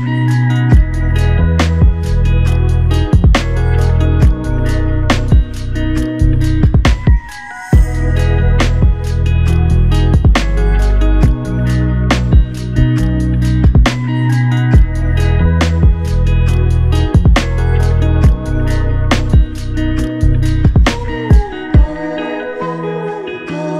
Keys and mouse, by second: 0.6 alt+m, 2.0 alt+click, 3.7 alt+shift+click, 5.5 typing, 11.7 q, 13.1 typing, 21.1 typing.